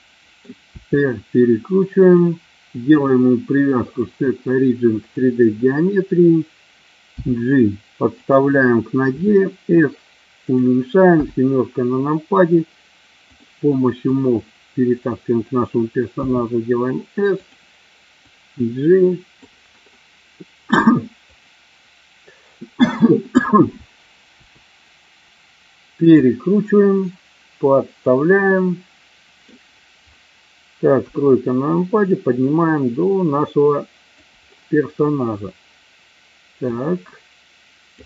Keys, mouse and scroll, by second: 0.7 r, 1.9 click, 2.9-5.1 drag, 7.1 g, 9.1 s, 11.0 KP_7, 13.3 click, 13.9-15.4 drag, 16.1 s, 18.3-19.4 drag, 24.4 r, 26.0 click, 27.0 click, 28.4-29.5 middle drag, 30.9 KP_3, 32.0-34.2 drag, 36.8-38.0 drag.